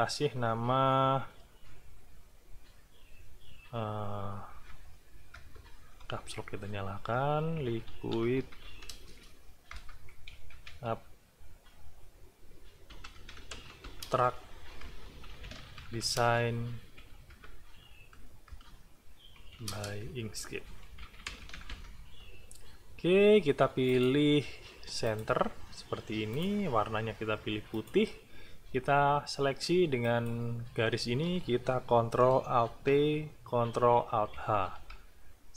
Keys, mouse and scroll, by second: 4.5 l, 5.3 BackSpace, 5.7 Caps_Lock, 6.9-11.2 typing, 9.7 Return, 12.7-16.8 typing, 14.8 Return, 17.9 BackSpace, 18.5 Return, 19.1-22.2 typing, 20.0 Return, 23.9 click, 25.0 click, 26.3 click, 27.7 click, 30.1 shift+click, 32.8 ctrl+alt+t, 34.3 ctrl+alt+h.